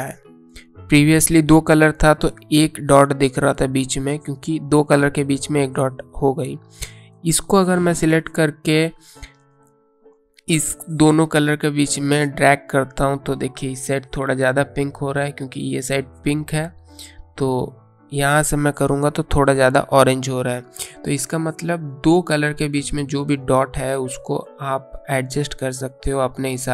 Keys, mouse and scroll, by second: 7.8 click, 12.2 click, 17.7 click, 22.4 click, 26.2 click.